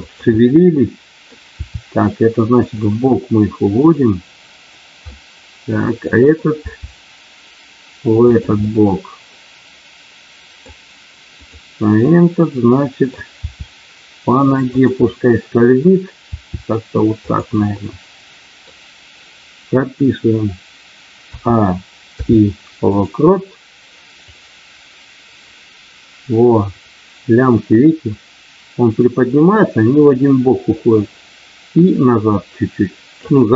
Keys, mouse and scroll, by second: 0.0 click, 0.4 middle click, 1.5 r, 2.6 click, 3.7 click, 5.1-6.4 middle drag, 6.6 r, 8.2 click, 9.5-10.7 middle drag, 11.3 click, 12.3 middle click, 13.3 r, 15.0 middle click, 17.2 click, 17.7-18.8 middle drag, 22.1 i, 24.3-33.2 drag.